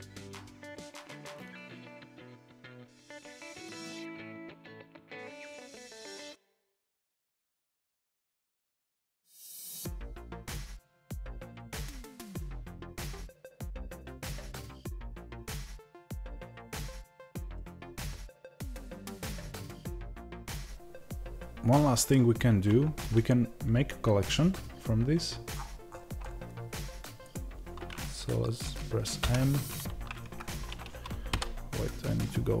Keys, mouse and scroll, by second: 0.3 g, 0.6 click, 0.7 middle click, 1.2 scroll up 1, 1.4 scroll down 1, 1.6 click, 1.6 g, 2.1 middle click, 2.3 g, 2.5 click, 2.6 middle click, 3.0 click, 3.0 g, 3.3 middle click, 3.8 click, 4.1 scroll up 1, 4.2-4.6 scroll down 1, 4.6 scroll up 1, 4.8 scroll down 1, 5.1 Tab, 5.7 scroll down 1, 5.9 s, 6.7 middle click, 7.1 click, 7.5 middle click, 8.2 click, 9.2 click, 9.3 r, 12.8 middle click, 13.1 click, 15.4 click, 15.5 r, 16.5 click, 16.6-19.5 middle drag, 16.9 scroll down 1, 17.7-19.5 scroll down 1, 19.5 click, 19.7-31.2 middle drag, 31.2 KP_Divide, 32.1-32.6 scroll up 1.